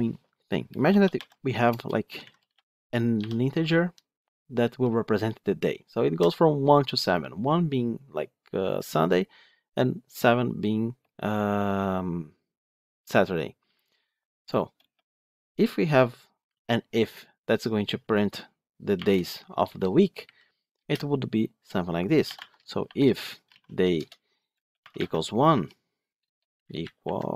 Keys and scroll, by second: 23.9 Return.